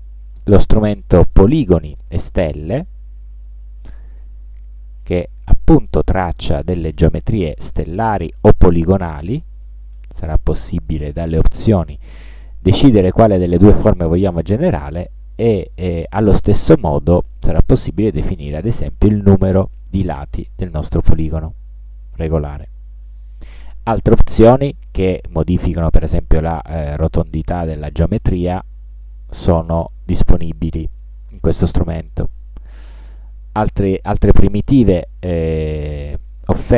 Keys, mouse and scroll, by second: 0.3 click, 1.5-2.6 drag, 3.4-6.6 drag, 9.2 click, 10.1 click, 11.2 click, 12.1 click, 16.7 click, 17.5 click, 18.1 click, 18.5 click, 19.5 click, 20.2 click, 20.8 click, 27.5-28.8 drag, 30.6 middle click, 31.3 ctrl+scroll down 2, 31.9 ctrl+scroll up 2, 32.5 ctrl+scroll down 2.